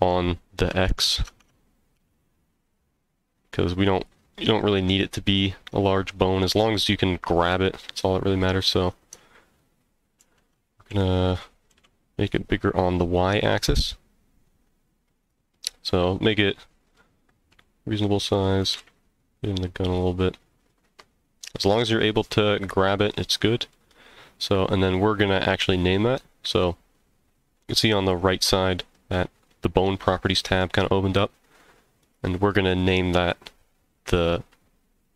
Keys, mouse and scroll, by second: 1.0 ctrl+alt+s, 1.9 x, 3.9 right click, 5.2-6.4 middle drag, 10.2 ctrl+alt+s, 10.9 z, 11.7 y, 15.2 click, 15.5-17.0 middle drag, 17.5 s, 18.3 click, 18.6 g, 18.7 z, 19.9 click, 20.2-21.4 middle drag, 22.1-23.7 middle drag, 32.0-35.1 drag.